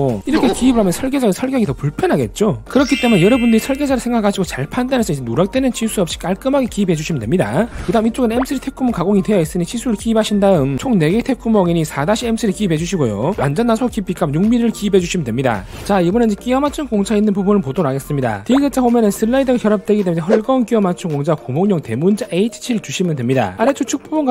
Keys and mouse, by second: 0.0 right click, 0.7 click, 1.3 click.